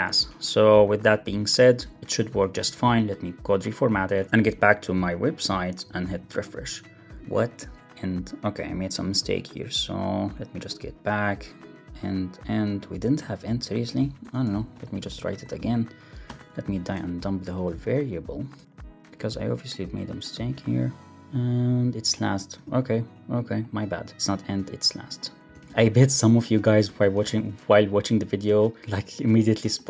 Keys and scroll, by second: 0.1 Up, 1.4 shift+super+Left, 1.7 super+x, 1.9 super+BackSpace, 2.1 super+s, 2.4 alt+super+l, 2.5 super+s, 5.9 super+r, 14.1 Return, 16.8 shift+Left, 17.4 alt+shift+Right, 18.7 Left, 19.0 super+s, 20.4 super+r, 22.5 super+c, 24.5 super+v, 25.6 super+s, 25.6 alt+super+l, 25.7 super+s, 26.8 super+BackSpace, 26.9 super+s, 27.1 alt+super+l, 27.2 super+s.